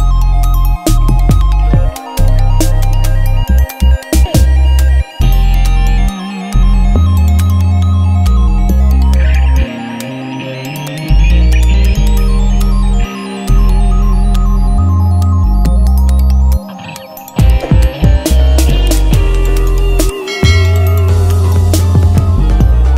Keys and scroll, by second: 4.9 F9, 16.4 alt+Tab, 17.1 alt+Tab, 20.2 Return, 22.3-22.9 typing.